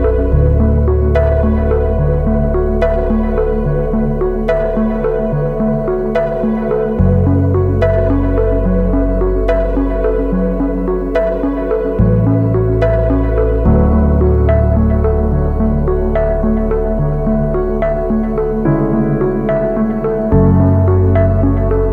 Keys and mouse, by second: 1.9-2.5 drag, 3.5 Tab, 3.8 shift+drag, 6.2 shift+click, 7.7 shift+click, 9.4-10.5 drag, 15.6-19.5 drag, 20.0-20.6 shift+drag, 20.8 Tab, 21.0 shift+drag, 21.5 Tab.